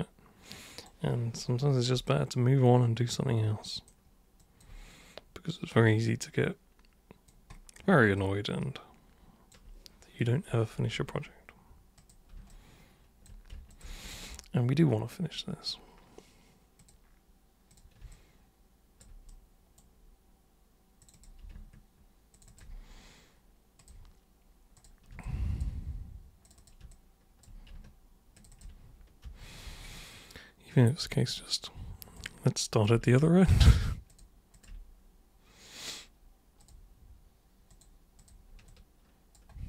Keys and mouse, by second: 2.1-3.9 alt+super+drag, 4.4 alt+super+click, 5.9-7.3 alt+super+drag, 8.1-9.5 alt+super+drag, 11.9 super+click, 12.5 alt+super+click, 13.7 ctrl+shift+super+click, 16.8 super+click, 17.7 super+click, 18.1 alt+super+click, 19.3 super+right click, 21.0 click, 22.3 ctrl+shift+click, 23.7 click, 24.7 click, 25.2 alt+click, 26.4 click, 26.5 super+click, 26.9-27.4 alt+super+drag, 28.3 ctrl+shift+super+click, 28.5 ctrl+shift+super+click, 29.2 super+g, 30.0 alt+super+click, 31.3 super+right click, 32.7 super+click, 33.4 ctrl+shift+super+click, 34.1 ctrl+shift+super+click, 34.5 ctrl+shift+super+click, 36.6 super+click, 37.7 super+click, 38.1 super+click, 38.6 alt+super+click.